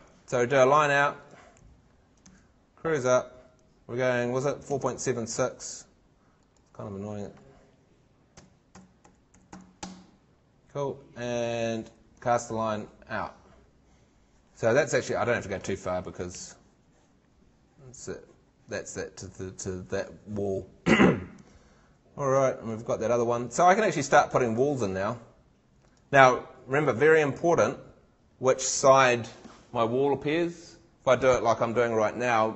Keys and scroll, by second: 3.1 super+Tab, 4.8 super+Tab, 8.3 d, 9.8 Return, 16.3 shift+super+Tab, 22.5 super+Tab.